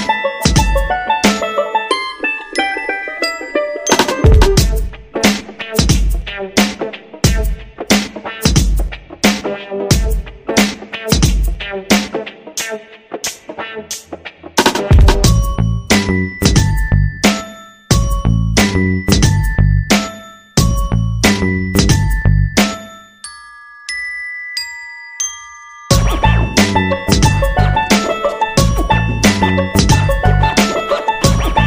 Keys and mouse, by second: 0.6 g, 0.6 s, 1.8 g, 2.5 Tab, 3.4 shift+middle drag, 3.8 right drag, 4.1-5.2 middle drag, 5.3 KP_3, 5.7 shift+middle drag, 6.7 right click, 7.0 Tab, 7.2 shift+middle click, 7.9 alt+z, 8.3 right drag, 8.6 c, 10.1 g, 13.1 c, 13.8 g, 15.1 right click, 15.3 c, 16.1 g, 17.0 right click, 17.4 g, 18.0 r, 19.2 shift+middle click, 20.3 right click, 20.5 c, 21.5 c, 22.3 g, 24.2 right click, 24.4 g, 25.1 r, 26.1 g, 27.1 right click, 27.2 r, 28.2 g, 29.2 right click, 29.4 g, 30.5 right click.